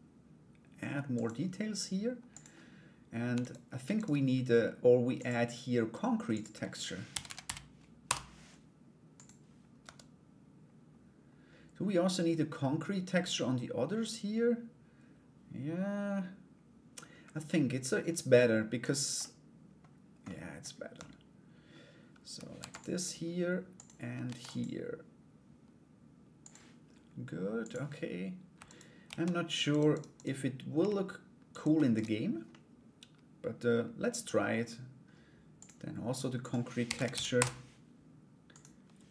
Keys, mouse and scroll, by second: 1.9 click, 3.0 alt+right click, 3.5 shift+right click, 4.7 click, 6.0-8.1 drag, 8.8 click, 9.4 Tab, 18.4 right click, 18.8 middle click, 19.8 middle click, 20.5 Tab, 22.1 ctrl+r, 27.2 click, 28.2 alt+right click, 29.3 shift+right click, 29.5 shift+right click, 29.7 shift+right click, 31.1 shift+right click, 31.5 shift+right click, 32.1-33.8 middle drag, 35.1 click, 36.1-37.3 drag.